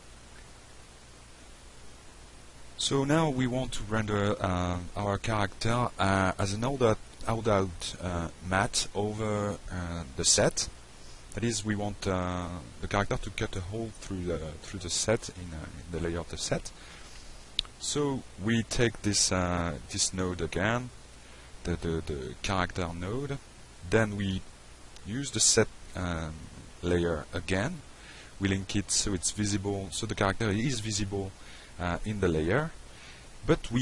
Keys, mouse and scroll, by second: 7.7 click, 8.3 click, 9.0 click, 12.2 click, 12.8 click, 13.5 click, 13.9 click, 14.6 middle click, 15.5 alt+middle drag, 16.3-16.8 drag, 17.0-17.4 drag, 17.6 drag, 18.2 click, 22.2 click, 23.5 click, 24.8-25.2 drag, 25.6-26.6 drag, 26.8 click, 29.5 click, 31.5-33.8 shift+drag.